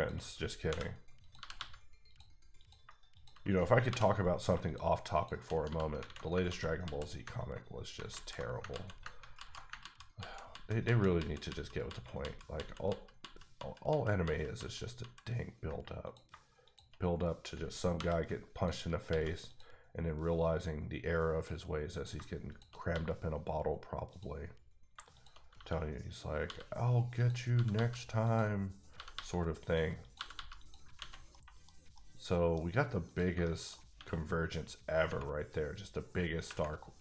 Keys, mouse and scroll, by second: 0.7 j, 1.2 click, 1.4 g, 1.5 g, 2.1 click, 2.6 click, 3.1 shift+click, 3.9 j, 5.1 shift+double click, 5.6 f, 6.0 alt+a, 6.5 ctrl+z, 6.8 ctrl+z, 9.3 z, 12.2 ctrl+z, 12.9 ctrl+z, 13.5 ctrl+z, 14.2 ctrl+z, 14.5 ctrl+z, 15.0 ctrl+z, 16.0 click, 16.3 shift+click, 17.9 j, 18.5 click, 19.1 x, 19.4 click, 21.9 click, 22.1 shift+click, 22.8 click, 22.9 f, 24.1 click, 24.9 shift+click, 25.5 f, 26.4 f, 27.1 click, 27.5 g, 27.7 g, 28.2 click, 28.9 g, 29.1 g, 29.6 click, 30.0 click, 30.1 g, 30.3 g, 30.6 click, 31.0 alt+a, 31.0 alt+scroll down 2, 31.3 middle click, 31.9 middle click, 33.1 click, 33.4 shift+middle click, 33.9 x, 35.1 Tab, 36.4 Tab.